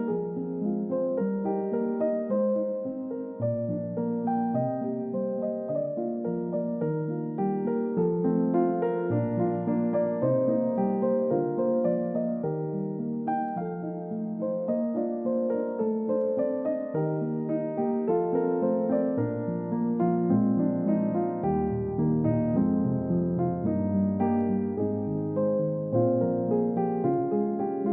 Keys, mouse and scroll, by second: 1.6 double click, 3.6 double click, 3.8-4.3 scroll down 1, 4.3 middle click, 4.5-5.0 scroll up 1, 10.5-11.7 typing, 13.1 Return, 14.7 scroll down 1, 17.6 middle click, 21.7 scroll up 1, 22.1 middle click, 24.5 middle click, 24.8 scroll up 1, 25.0-25.7 scroll down 1, 27.1 typing.